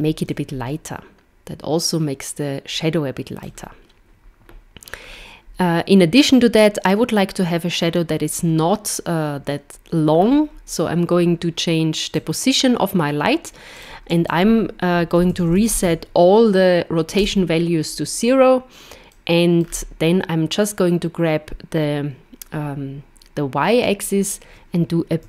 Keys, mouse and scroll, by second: 0.3 click, 5.0 scroll down 2, 10.1 scroll down 3, 12.1 click, 13.8 click, 19.1 middle click, 19.6 scroll down 4, 23.8 click.